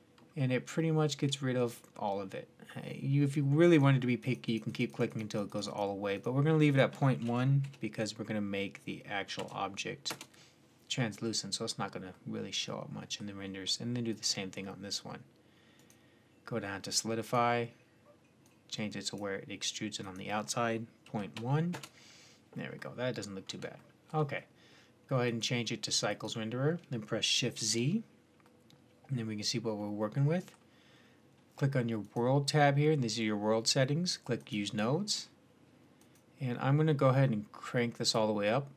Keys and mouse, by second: 0.1-0.9 middle drag, 2.9 middle click, 3.5-8.4 drag, 11.1-13.9 middle drag, 13.9-18.1 drag, 18.3-22.2 drag, 22.6-25.1 middle drag, 25.1-27.6 drag, 27.6 shift+z, 29.6-30.5 drag, 31.9-38.4 drag.